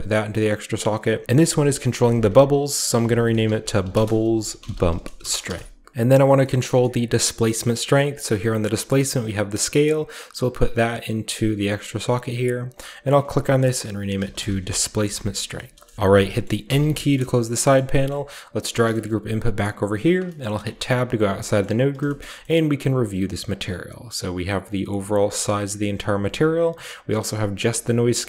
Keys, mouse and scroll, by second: 0.9 click, 1.1 click, 1.5-7.8 typing, 6.1 scroll down 1, 7.3 scroll down 1, 7.5-8.3 middle drag, 7.5-8.1 scroll up 1, 8.1-10.8 drag, 8.4 scroll up 1, 9.4 middle click, 10.6-11.3 typing, 12.0-12.4 drag, 12.5 click, 12.7-14.1 drag, 14.1-17.4 typing, 15.4 Return, 16.3-17.4 middle drag, 17.4-18.9 scroll down 2, 17.6 middle click, 17.9 middle click, 18.4-19.8 drag, 18.8 typing, 19.9-21.0 drag, 20.2-21.4 typing, 20.8-21.7 scroll up 1, 21.4-21.9 middle drag, 21.7 scroll down 1, 22.0 shift+middle click, 22.4 shift+middle click, 23.3-28.2 shift+drag, 23.3-24.0 shift+scroll up 1.